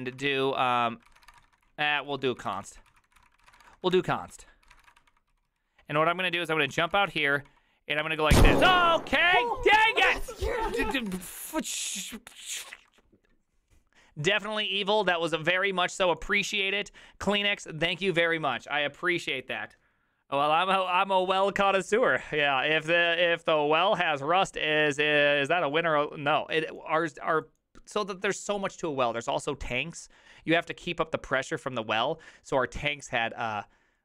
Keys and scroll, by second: 0.0-5.3 typing, 0.2 ctrl+c, 4.3 ctrl+d, 5.8 ctrl+u, 6.6-7.4 typing, 7.5 ctrl+d, 10.9 ctrl+d, 10.9 ctrl+c, 11.0 ctrl+:, 11.1 typing, 11.1 Return.